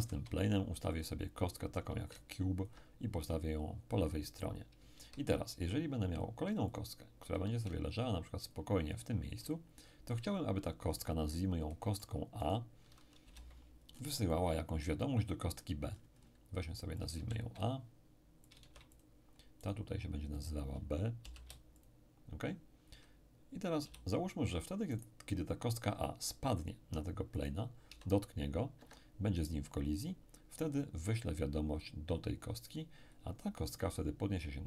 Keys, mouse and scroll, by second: 0.0 shift+a, 1.0 shift+click, 2.1-4.9 ctrl+drag, 5.0 shift+a, 6.7-10.6 drag, 10.6-11.0 ctrl+scroll up 2, 11.0-13.5 ctrl+middle drag, 12.4 right click, 13.2 n, 13.9-15.6 scroll down 2, 15.6-17.0 scroll down 1, 17.0 shift+click, 17.2 shift+a, 18.5-21.4 shift+drag, 18.6 shift+a, 19.6-21.4 shift+right drag, 21.2 shift+b, 21.8 shift+click, 23.8 n, 25.0 right click, 27.4 right click, 27.9 s, 28.8 Escape.